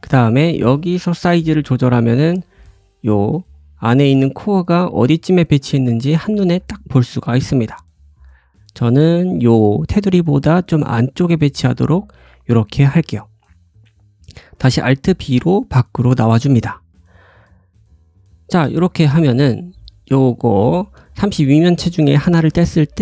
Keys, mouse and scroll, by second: 0.1 scroll down 1, 0.5 s, 2.0-2.3 scroll up 1, 2.3-15.6 drag, 2.3 middle click, 2.3 right click, 2.8 middle click, 2.8 right click, 3.4 middle click, 4.7 scroll down 1, 4.8 s, 6.5 s, 8.7-9.3 scroll up 2, 11.1 s, 12.6-13.1 scroll down 1, 13.1 middle click, 13.1 right click, 13.2-13.7 scroll down 2, 14.5 alt+b, 15.1 scroll down 1, 15.3 `, 15.7-16.1 scroll down 2, 16.1-16.6 scroll up 4, 16.6 click, 18.1 click, 18.9 scroll up 1, 19.2 middle click, 19.9 click, 20.3 middle click, 20.6 shift+middle click, 21.0 middle click, 22.1 click, 22.4 g, 22.9 middle click.